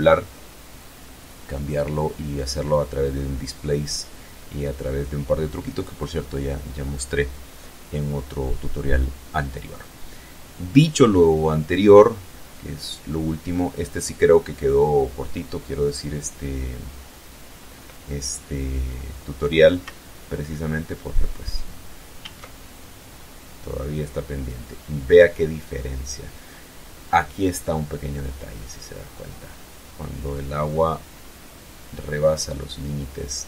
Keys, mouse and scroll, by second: 12.5 click, 21.0 alt+a.